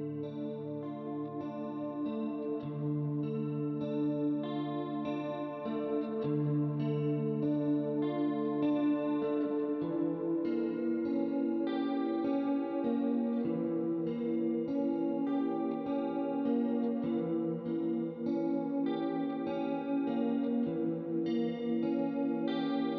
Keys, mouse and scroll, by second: 0.1 click, 1.8 click, 3.1 click, 3.8 shift+click, 4.5 click, 5.5 click, 6.4 click, 7.3 middle click, 8.9 click, 9.8 middle click, 10.9 middle click, 12.1 ctrl+d, 12.6 click, 13.5 click, 14.7 click, 15.9 click, 17.5 click, 18.7 click, 20.1 middle click, 21.0 click.